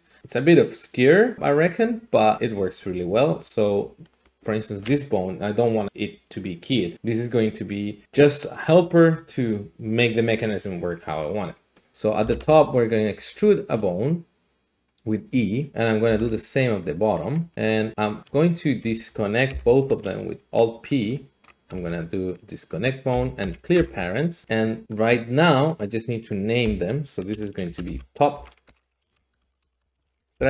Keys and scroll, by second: 12.2-13.1 typing, 16.1 e, 19.5 alt+p, 21.7 Down, 23.4 Up, 23.7 Return, 26.6 F2, 27.6-30.4 typing.